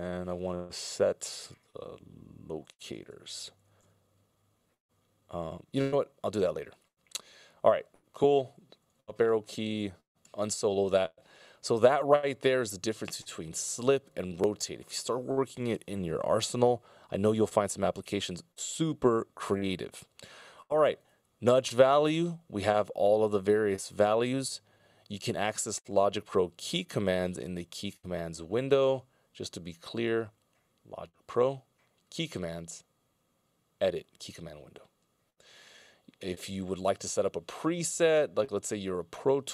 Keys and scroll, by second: 2.7 l, 9.1 Up.